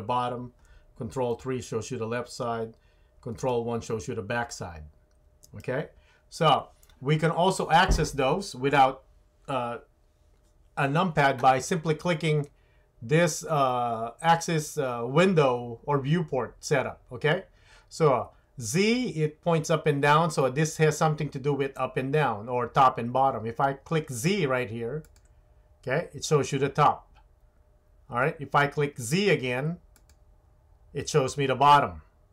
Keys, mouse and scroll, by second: 1.4 ctrl+KP_3, 3.5 ctrl+KP_1, 5.6 KP_1, 25.0 click, 30.0 click.